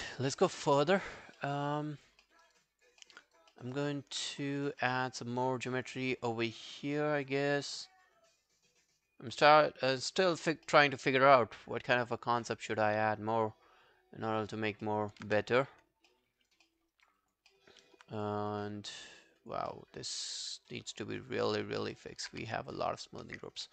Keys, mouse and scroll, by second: 0.1 alt+right click, 0.4 alt+click, 0.8 alt+middle click, 1.1 alt+scroll down 1, 1.4 alt+middle click, 1.7 alt+right click, 1.9 alt+click, 2.3 alt+middle click, 2.5 alt+right click, 2.7 alt+click, 3.0 alt+middle click, 3.3 alt+right click, 3.6 alt+middle click, 3.8 alt+right click, 4.8 alt+middle click, 5.4 alt+scroll down 1, 5.4 alt+click, 6.3 alt+scroll down 1, 6.5 alt+middle click, 6.9 alt+scroll down 1, 7.1 alt+click, 8.2 alt+click, 9.6 alt+middle click, 10.0 alt+click, 10.7 alt+middle click, 10.9 alt+right click, 11.1 alt+click, 14.6 alt+scroll down 4, 14.9 alt+middle click, 15.2 alt+q, 16.1 alt+middle click, 16.4 alt+right click, 16.7 alt+middle click, 16.9 alt+right click, 17.2 alt+click, 17.5 alt+middle click, 17.7 alt+right click, 18.5 scroll up 3, 18.7 alt+click, 19.7 alt+middle click, 20.0 alt+right click, 20.3 alt+click, 21.8 alt+middle click, 22.0 alt+right click, 22.3 q, 22.5 right click, 23.6 shift+click.